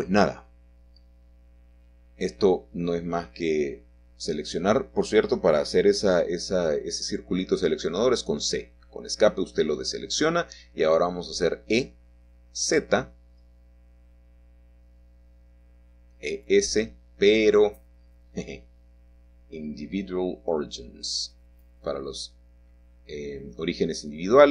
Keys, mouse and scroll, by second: 1.4-2.7 drag, 3.3-4.3 drag, 5.0-6.0 drag, 6.5-7.9 drag, 8.2 click, 9.4 Escape, 9.9-12.2 middle drag, 9.9-11.0 scroll down 1, 11.0 scroll down 1, 12.3 e, 15.5 click, 16.6 e, 19.7 click, 21.5 click, 22.8 e, 24.4 click.